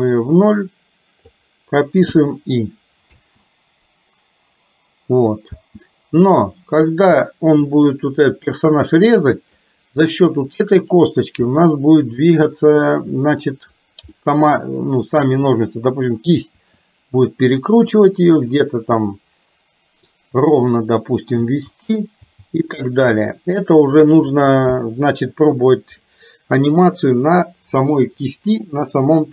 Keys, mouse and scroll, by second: 2.1 i, 3.1 space, 7.1 shift+space, 7.3 shift+middle click, 8.5-9.6 middle drag, 11.6 middle click, 12.5-13.5 middle drag, 14.3 middle click, 16.6 r, 21.4 space, 23.2 space.